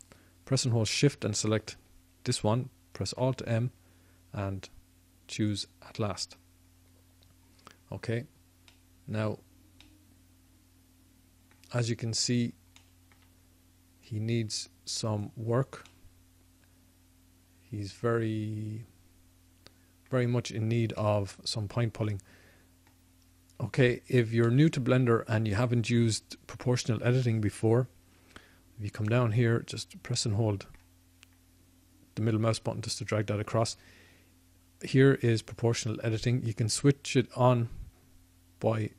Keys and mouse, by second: 2.9 alt+m, 5.6 alt+m, 6.4 middle click, 9.7-12.2 middle drag, 12.2-18.2 drag, 20.4 middle click, 20.9-38.9 drag.